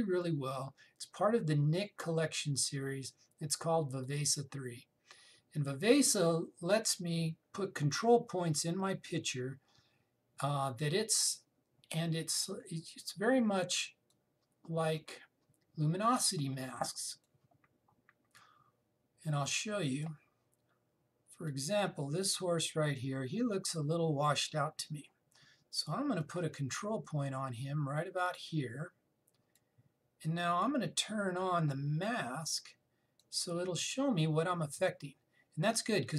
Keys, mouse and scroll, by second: 4.7 click, 14.8-26.0 drag, 26.9 click, 31.9-33.3 scroll down 1, 33.8 click.